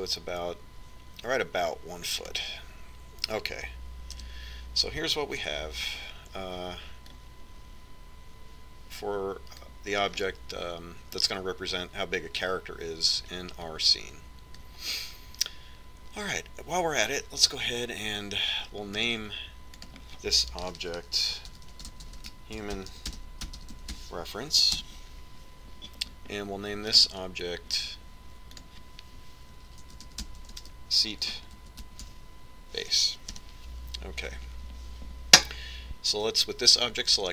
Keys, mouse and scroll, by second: 5.6 KP_1, 6.9 Tab, 8.5-10.6 drag, 11.6-15.1 middle drag, 15.1-18.3 drag, 20.6-23.2 drag, 28.5-30.2 right drag, 30.1-35.0 drag.